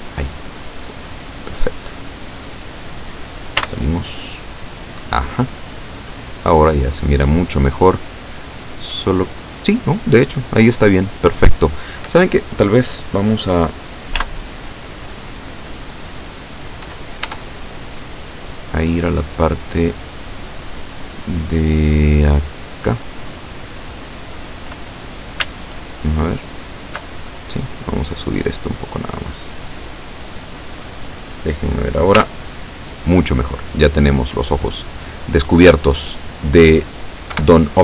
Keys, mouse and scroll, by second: 2.3-2.7 scroll down 2, 3.7 z, 4.5-6.0 drag, 6.0 click, 7.2-7.7 scroll up 1, 7.9 click, 10.6 right click, 14.2 z, 17.3 Tab, 18.0-18.4 scroll up 2, 19.0 scroll up 2, 22.8 right click, 26.1 alt+shift+right click, 28.5-30.8 drag, 32.3 z, 33.4-34.0 scroll down 2, 34.3-36.1 middle drag, 36.2-36.6 scroll up 1, 37.4 KP_7.